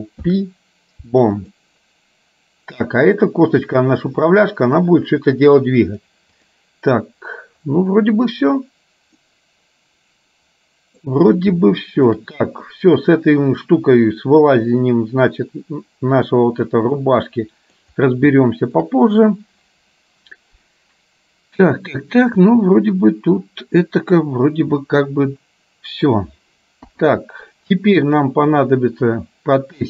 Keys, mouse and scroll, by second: 0.3 ctrl+p, 3.0 click, 6.1 click, 9.4-11.1 middle drag, 11.8 shift+middle click, 17.0 middle click, 18.5 shift+middle click, 22.5-26.3 middle drag, 26.9 KP_3.